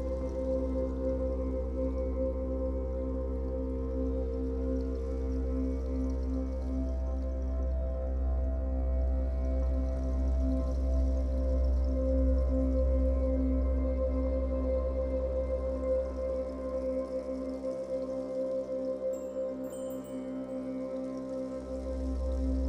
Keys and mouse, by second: 0.8 click, 2.8 typing, 3.3-3.9 drag, 4.4-5.4 drag, 6.3 typing, 6.9-7.4 drag, 8.1 Right, 8.5 Right, 8.7 Right, 8.8 Right, 9.9 i, 10.8 click, 12.3 click, 13.6 click, 14.8 shift+click, 16.0 click, 17.6-19.1 drag, 19.6 s.